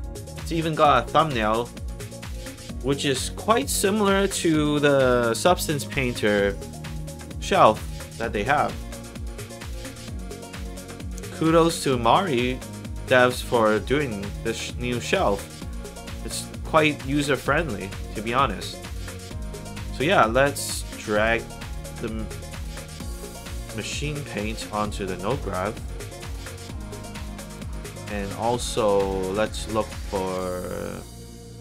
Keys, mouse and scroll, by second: 0.1 click, 1.5 click, 14.5-15.5 drag, 17.2 scroll down 2, 17.9 middle click, 18.7 middle click, 19.3 middle click, 19.9 click, 23.7-25.0 drag, 26.1-26.8 scroll up 3, 27.1 click, 30.9 click.